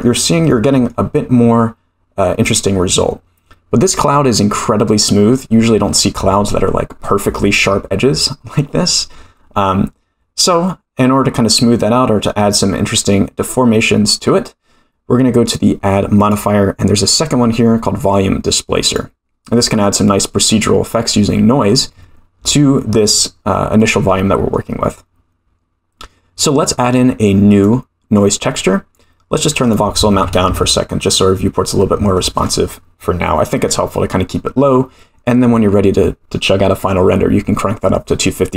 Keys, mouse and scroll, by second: 0.5-0.9 middle drag, 16.2-19.7 drag, 23.8-24.6 middle drag, 27.5 click, 29.7-31.2 drag.